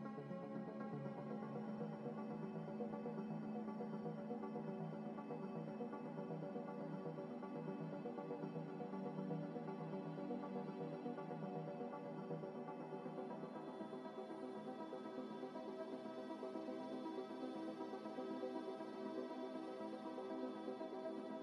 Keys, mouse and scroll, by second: 0.1 Tab, 0.3 f, 0.8 Tab, 1.0 z, 1.4 middle click, 2.7 g, 2.9 y, 3.2 x, 5.4 z, 5.8 z, 6.4 middle click, 6.8 g, 6.9 x, 9.5 Tab, 9.9 a, 12.7-17.5 typing, 13.0 scroll down 1, 14.9 scroll up 1, 15.1 scroll down 1, 18.4 scroll up 1, 18.9 s, 19.5 g, 21.3 s.